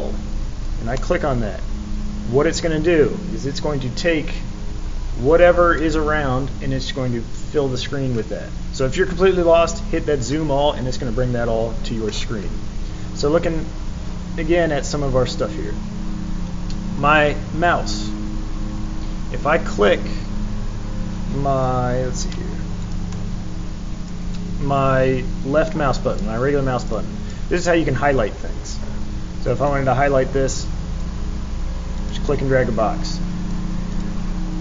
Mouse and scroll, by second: 0.9 click, 22.8 click, 23.1-24.0 drag, 24.3-26.1 drag, 26.7 click, 26.9-27.3 drag, 29.6-31.0 drag, 31.9 click, 32.2-33.5 drag, 33.9 click.